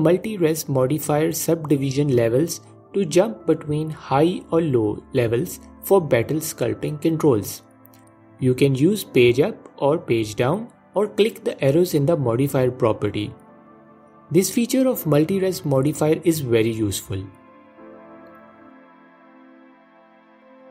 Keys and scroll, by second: 4.4 f, 10.5 F4.